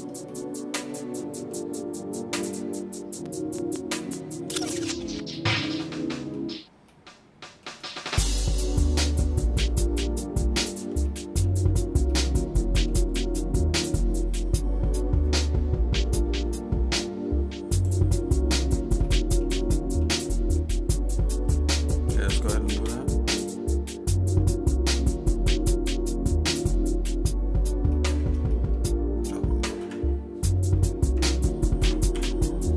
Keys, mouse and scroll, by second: 0.4 shift+middle click, 1.2 middle click, 4.7 shift+middle click, 5.8 middle click, 6.9 shift+middle click, 8.2 middle click, 9.5 scroll down 1, 9.5-9.8 scroll up 1, 10.6 shift+middle click, 11.0 middle click, 12.1 shift+middle click, 13.2 middle click, 18.0 click, 19.0 shift+middle click, 19.7 middle click, 20.5 shift+middle click, 21.5 middle click, 22.3 click, 22.7 shift+a, 27.9 shift+middle click, 28.5 middle click, 29.8 Delete, 31.2 Tab, 32.1 Delete.